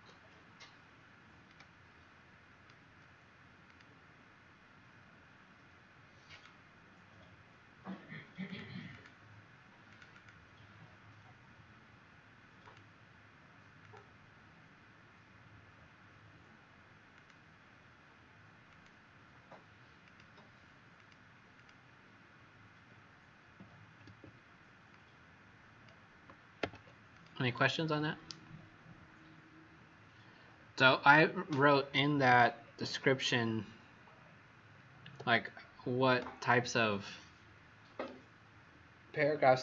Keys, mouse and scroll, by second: 1.4 alt+click, 3.6 click, 10.1 click, 12.6 click, 21.5 click, 24.9 click, 32.6 alt+scroll down 1, 34.2 alt+scroll up 1, 35.3 click.